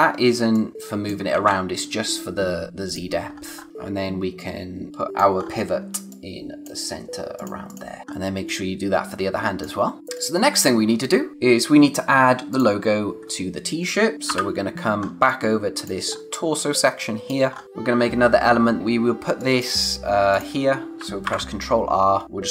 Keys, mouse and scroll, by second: 1.3 ctrl+z, 2.8 click, 3.1-3.7 scroll down 1, 4.9 click, 5.4-6.0 scroll up 1, 6.0 click, 8.0 scroll down 1, 8.1 space, 8.4 click, 8.6 space, 9.9 scroll down 1, 10.1 click, 11.3 scroll up 1, 12.5 click, 14.2 o, 14.9 scroll down 1, 15.1 space, 15.2 click, 15.6 space, 16.1-16.8 scroll up 1, 16.8 space, 16.9 click, 17.5 scroll up 1, 17.6 space, 18.8-19.1 scroll up 1, 19.1 space, 19.3 click, 19.6 space, 20.3 click, 21.2 ctrl+r, 22.2 click.